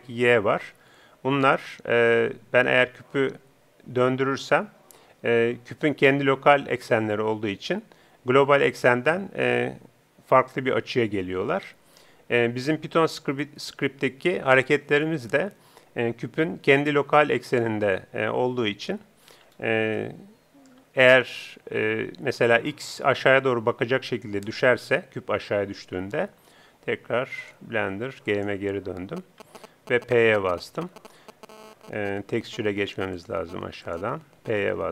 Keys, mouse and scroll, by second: 0.8 z, 2.7 r, 19.6-22.5 middle drag, 27.8-29.1 drag, 31.9 p, 33.1-34.8 drag.